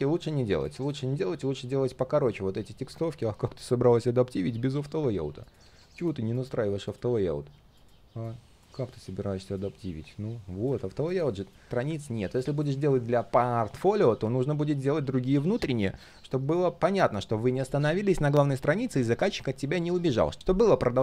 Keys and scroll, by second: 3.0 ctrl+z, 10.7 ctrl+z.